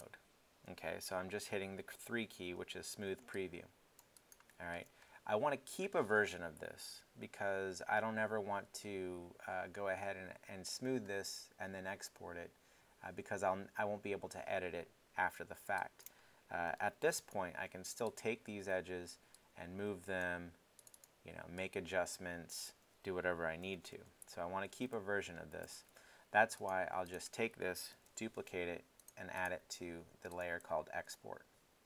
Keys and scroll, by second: 0.7 i, 23.7 z, 27.9 super+d.